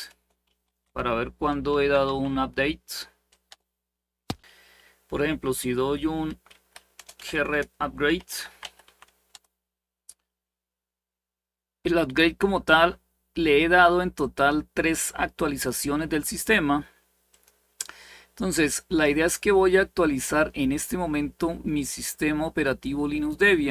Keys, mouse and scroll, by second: 0.0-2.3 typing, 3.2 Return, 6.2 Up, 6.7-9.1 typing, 13.9-15.4 drag, 17.0 click, 19.1-20.8 scroll up 1, 20.8-22.0 scroll down 1, 22.0-23.7 scroll down 1.